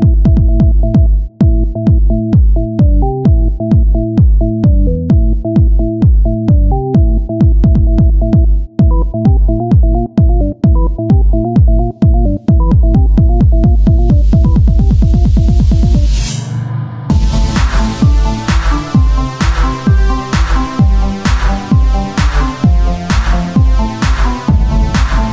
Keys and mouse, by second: 0.7 click, 0.8 Tab, 1.5-2.9 right drag, 4.0-5.1 drag, 5.0 Tab, 6.8 z, 7.1 click, 8.3 z, 10.0-11.7 drag, 11.7 Tab, 15.4 click, 15.5 Tab, 16.2 Tab, 17.6 click, 19.1 Tab, 21.2 KP_1, 22.7-25.3 z.